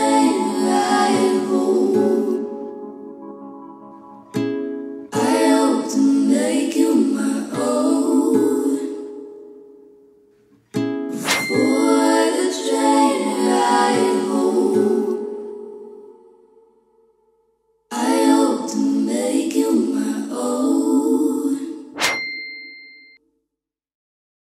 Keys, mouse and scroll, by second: 2.0-2.9 drag, 5.2-7.9 typing, 9.2 click, 12.9 scroll up 1, 14.0-18.1 drag, 14.4 ctrl+d, 14.6 Delete, 14.8 shift+Left, 15.1 Delete, 15.3 ctrl+d, 15.7-18.0 ctrl+z, 17.3 ctrl+z, 18.1 ctrl+z, 19.1 ctrl+z, 19.7 BackSpace, 20.1 ctrl+z, 20.1 click, 20.5 ctrl+d, 22.7 click, 23.6 click.